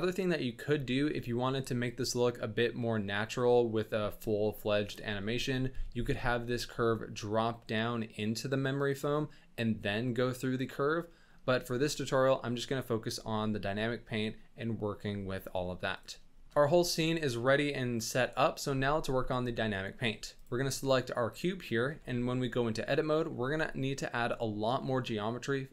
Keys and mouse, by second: 0.9 shift+middle click, 5.8 g, 11.1 drag, 11.1 middle drag, 15.9 click, 16.2 shift+n, 21.5 drag, 21.8 Tab, 23.0 click.